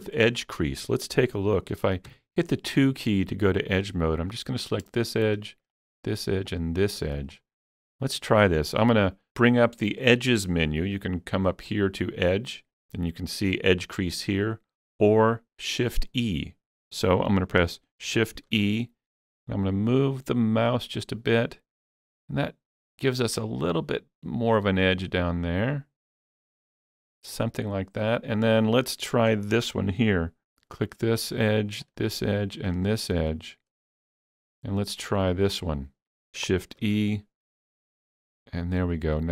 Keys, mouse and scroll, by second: 2.1-4.2 shift+middle drag, 2.1 2, 4.2 click, 5.8 shift+click, 6.5 shift+click, 8.2 middle click, 11.6 shift+click, 18.1 shift+click, 18.1-21.3 middle drag, 18.5 shift+e, 27.3 click, 27.3 shift+e, 30.8 click, 32.8 shift+click, 33.3-36.2 middle drag, 36.4-39.3 middle drag, 36.4 shift+click, 36.9 shift+e.